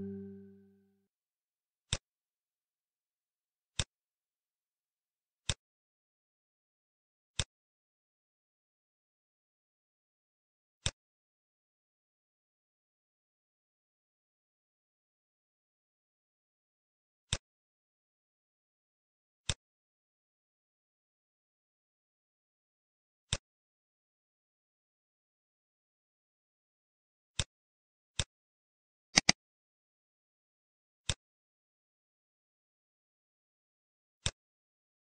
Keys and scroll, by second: 8.4 ctrl+s.